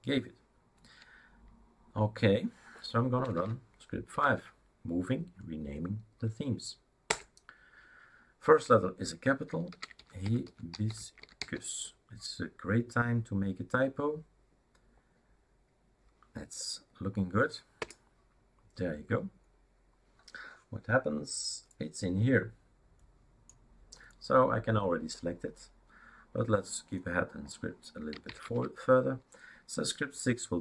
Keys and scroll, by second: 3.4-4.1 typing, 4.2 Tab, 7.2 Return, 9.5-11.9 typing, 17.9 Return, 28.4 typing.